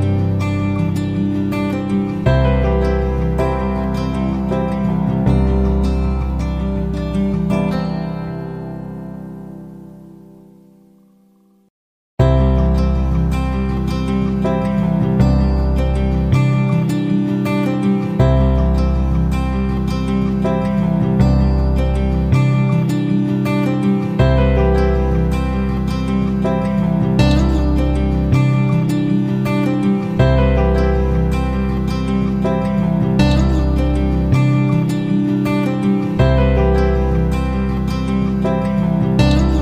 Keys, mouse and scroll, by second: 2.6 F9, 3.1-35.5 drag.